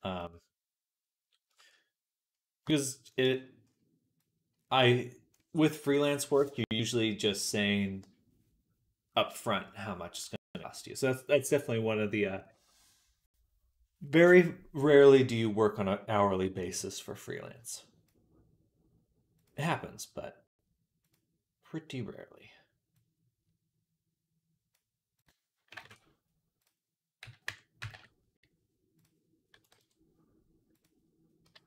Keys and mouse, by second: 0.0-3.1 drag, 0.0-3.0 middle drag, 0.0-3.0 right drag, 3.1 middle click, 4.0-31.6 drag.